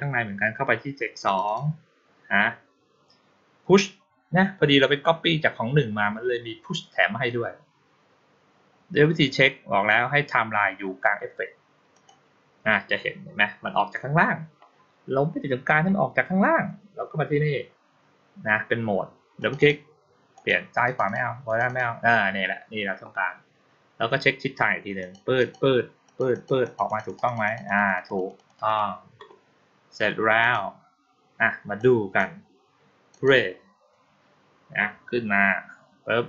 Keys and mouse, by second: 1.1 click, 1.3 click, 11.8 click, 19.3 click, 19.4 click, 20.2 click, 20.7 click, 20.9 click, 21.3 click, 21.5 click, 24.9 click, 25.2 click, 25.9 click, 26.2 click, 26.5 click, 26.7 click, 26.9 click, 27.1 click, 27.3 click, 27.5 click, 27.7 click, 27.9 click, 28.1 click, 28.3 click, 28.5 click, 30.3 click, 31.6 click, 33.0 click.